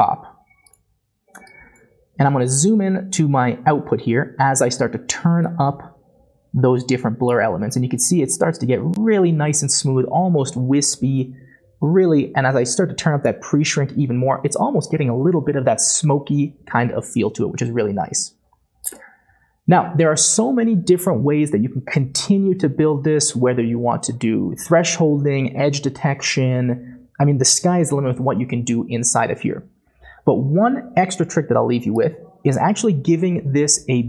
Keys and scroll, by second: 2.6-5.8 typing.